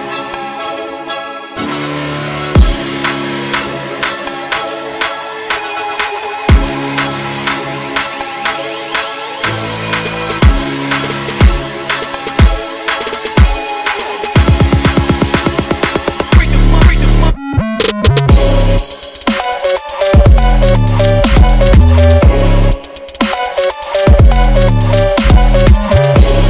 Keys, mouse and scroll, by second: 0.4 shift+d, 1.0 d, 1.2 s, 2.2 click, 2.7-3.3 scroll up 10, 3.5 g, 4.2 s, 4.7-5.3 right drag, 6.2 shift+d, 7.6 shift+d, 8.1 s, 9.1 scroll down 3, 9.5 drag, 9.7-10.1 scroll down 3, 10.1-10.6 scroll up 5, 10.6 click, 11.3 click, 12.0 scroll down 2, 12.2 click, 13.0-13.6 drag, 15.6-16.0 scroll up 4, 16.1 Tab, 16.2 click, 16.8 shift+a, 18.9 click, 20.4 scroll down 4, 20.6 s, 21.4 s, 21.9 click, 22.0 scroll up 2, 22.3 click, 22.5 s, 23.1 scroll up 4, 23.4 g, 24.1 s, 24.4 g, 25.1 click, 25.3 scroll down 3, 25.8 click, 26.1 click, 26.4 click.